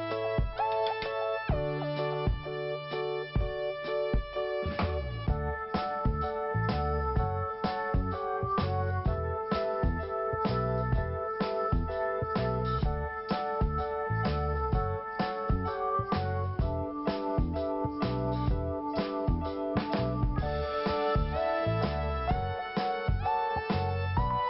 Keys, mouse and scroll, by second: 0.0 scroll up 2, 1.4 click, 2.6 click, 4.2 click, 4.3 click, 4.9 click, 5.9 scroll down 2, 6.5 scroll up 1, 7.6 click, 9.6 click, 11.3 click, 13.0 click, 13.9 click, 13.9 click, 15.4 click, 15.5 click, 15.9 scroll down 1, 16.5 scroll up 1, 17.0-17.4 scroll up 2, 17.1 click, 17.2 click, 17.4 click, 18.3 click, 18.4 click, 18.7 scroll down 1, 21.8 click, 22.0 click, 23.3 scroll down 1.